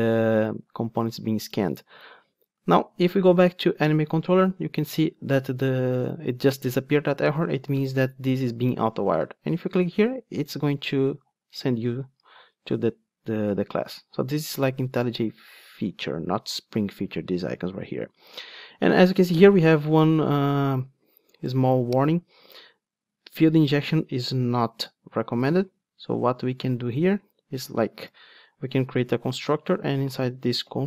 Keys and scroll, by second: 12.4 ctrl+Tab, 28.8 super+z.